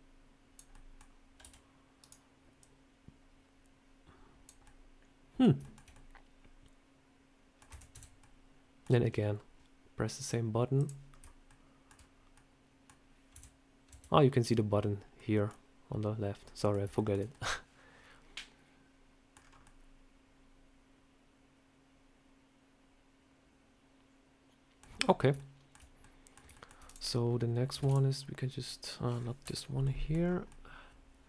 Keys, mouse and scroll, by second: 0.6 middle click, 1.3 s, 2.5 click, 4.5 middle click, 5.5 shift+middle click, 5.8 middle click, 7.6 Tab, 7.8 /, 8.1 middle click, 10.1 click, 11.0 scroll up 1, 11.4 shift+middle click, 12.2 middle click, 13.2 /, 13.8 /, 15.1 middle click, 16.3 middle click, 16.9 shift+middle click, 16.9 shift+middle click, 17.2 middle click, 19.3 scroll down 4, 19.5 middle click, 24.8 scroll down 1, 24.9 scroll up 3, 25.2 shift+middle click, 25.9 middle click, 26.4 shift+middle click, 26.6 shift+scroll down 1, 26.7 click, 27.7 shift+d, 29.3 Delete, 29.7 middle click, 30.0 scroll down 3, 30.4 middle click.